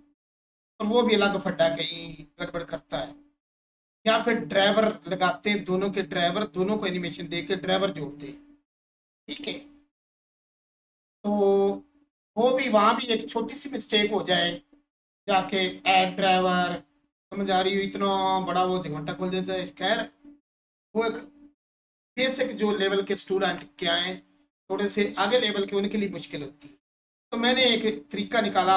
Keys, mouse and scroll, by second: 16.4 right click.